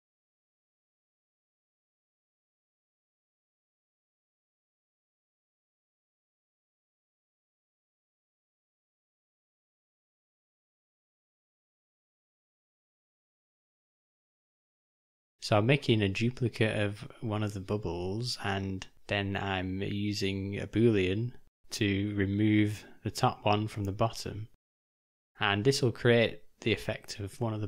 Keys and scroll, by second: 5.2 ], 12.5 shift+d, 18.3 ctrl+alt+-, 22.5 ctrl+z, 24.0 ctrl+z, 25.8 s, 27.4 g.